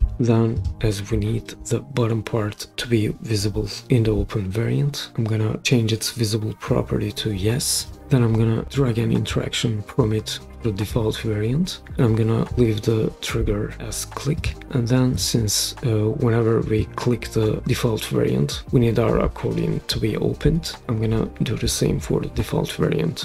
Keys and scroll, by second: 0.0-0.3 typing.